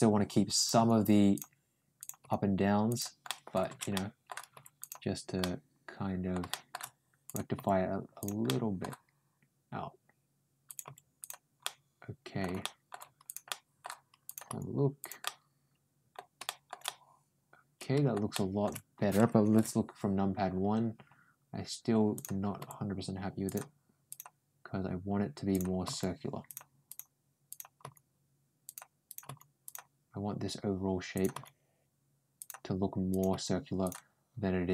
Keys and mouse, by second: 0.4 click, 0.6 g, 1.8 click, 2.0 g, 3.1 middle click, 3.7 middle click, 4.4 ctrl+g, 5.2 middle click, 6.3 middle click, 7.1 click, 7.4 ctrl+g, 8.3 middle click, 10.5 click, 10.7 g, 11.5 middle click, 12.5 middle click, 13.1 click, 13.4 middle click, 14.1 click, 14.3 g, 15.1 middle click, 16.3 middle click, 16.7-17.9 middle drag, 18.1 shift+middle click, 22.0 click, 22.4 g, 23.9 click, 25.4 click, 25.7 g, 26.7 click, 27.3 click, 27.6 g, 28.9 click, 29.1 g, 31.0 click, 31.1 g, 32.9 click, 33.1 g.